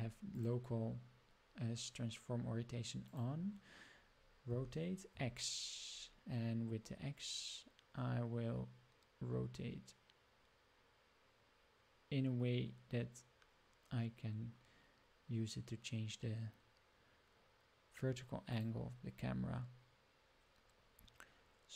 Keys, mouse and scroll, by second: 0.3-3.1 drag, 4.4 r, 20.2-20.9 scroll up 3.